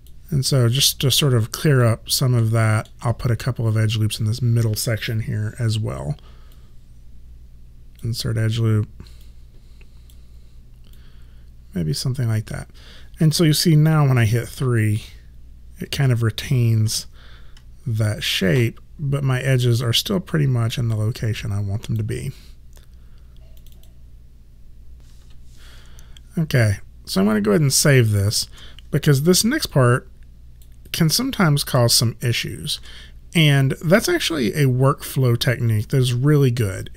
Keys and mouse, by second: 1.3 alt+click, 2.5 alt+middle click, 6.6 click, 9.3 click, 14.2 3, 16.8 w, 19.7 click, 23.6 click, 27.8 alt+right click, 29.1 f, 29.8 alt+click, 30.9 alt+right click, 32.0 alt+click.